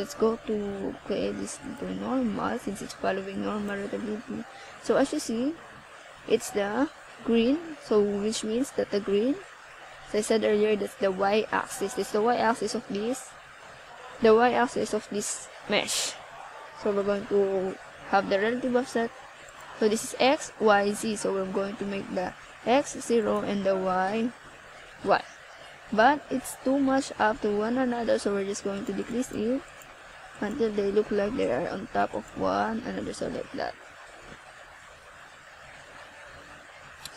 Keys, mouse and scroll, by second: 3.6 click, 6.6 middle click, 11.7 click, 13.7 click, 17.3 click, 18.1-19.9 scroll up 8, 21.1 click, 22.1 click, 24.1-24.8 scroll down 2, 25.3 click, 26.0 click.